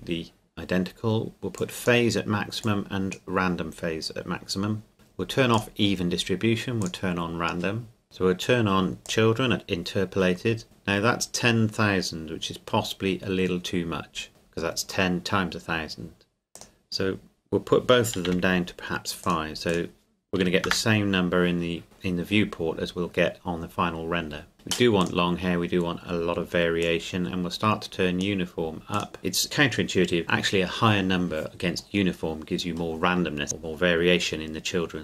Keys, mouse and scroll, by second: 1.6 click, 4.9 scroll up 1, 5.6 click, 9.0 click, 16.6 click, 18.3 KP_5, 19.2 click, 20.4 KP_5, 20.7 KP_Enter, 24.5 click.